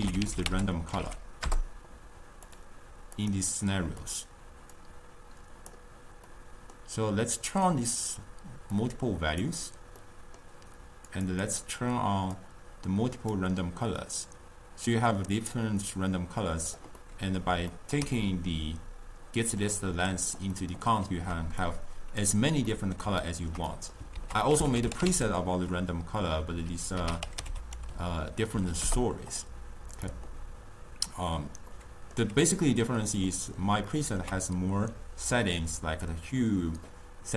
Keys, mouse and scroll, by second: 3.6 click, 4.5 click, 4.8-6.4 drag, 6.4-8.0 middle drag, 8.0 drag, 8.8 drag, 10.2-11.2 middle drag, 11.2 click, 11.9 click, 12.4-17.1 drag, 17.1-21.7 middle drag, 21.7 click, 22.8-24.3 middle drag, 24.3 ctrl+a, 31.8-37.0 middle drag.